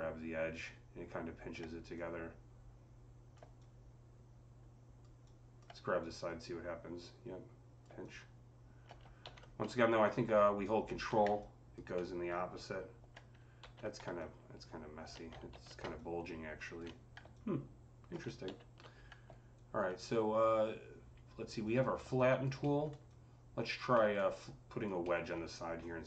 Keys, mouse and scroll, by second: 9.1 ctrl+z, 9.9-14.0 ctrl+drag, 11.8-14.0 alt+middle drag, 13.5 z, 14.0-21.5 ctrl+drag, 15.3 ctrl+z, 18.3 ctrl+z, 22.0 alt+click, 22.4 alt+middle click, 23.0-26.0 alt+drag, 23.8 alt+middle click, 24.9 alt+middle click.